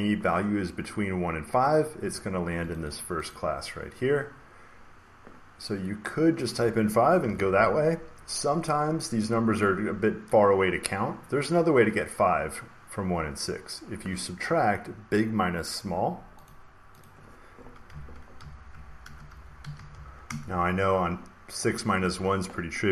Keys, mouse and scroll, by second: 2.7 click, 2.8 click, 3.2 click, 6.4-8.4 drag, 7.1 5, 10.2-12.2 drag, 16.4 click, 16.9 click, 17.6-20.3 typing, 22.0 shift+Right.